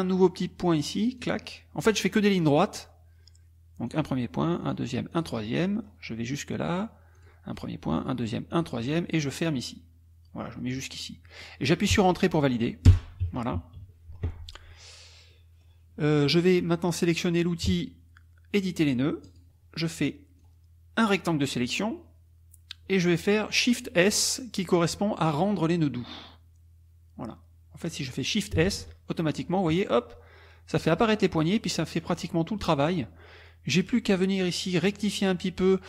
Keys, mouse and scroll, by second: 1.2 click, 3.9 click, 4.6 click, 5.1 click, 5.5-7.2 middle drag, 7.2 click, 8.0 click, 8.5 drag, 10.8 click, 12.9 Return, 13.2 KP_Subtract, 14.7 middle click, 14.7-15.8 scroll up 4, 15.3 middle click, 19.3 click, 20.4-21.8 drag, 28.7 shift+s, 31.3 click, 33.7 middle click, 33.7-34.0 scroll up 2.